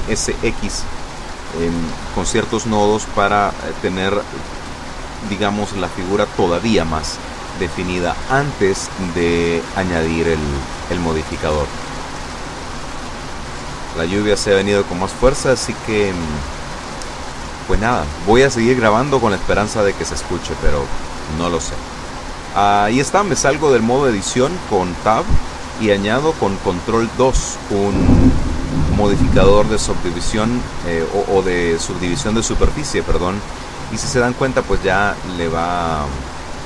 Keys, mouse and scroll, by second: 0.2 click, 1.9 o, 4.5 n, 20.1 Tab, 24.8 ctrl+2.